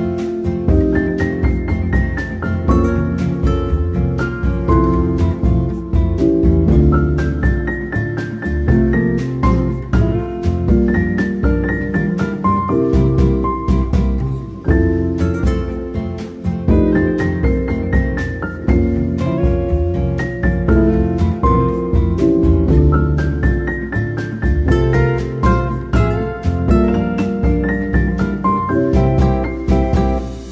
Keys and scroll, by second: 9.2 ctrl+z, 13.1 Tab, 16.9 8, 17.1 ctrl+s, 17.2 F2, 26.2 8.